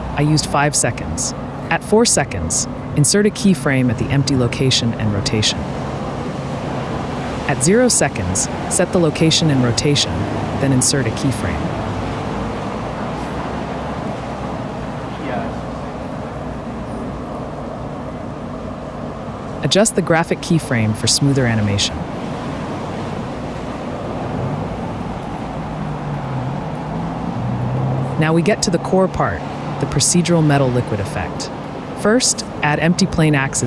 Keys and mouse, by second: 0.9-2.1 drag, 2.7 click, 3.2 Left, 3.8 Left, 4.6-5.0 drag, 7.2-7.8 right drag, 8.5 click, 9.0 ctrl+z, 9.2 click, 11.1-14.5 drag, 13.3 5, 15.6 right click, 16.3 right click, 17.0 right click, 17.2 click, 18.4-19.6 drag, 20.1 click, 20.8-21.4 drag, 21.4 KP_Decimal, 24.0 s, 24.2 x, 25.0 click, 25.8 s, 25.8 x, 26.7 n, 27.2 space, 30.1 click, 31.5 click, 32.3-33.6 drag.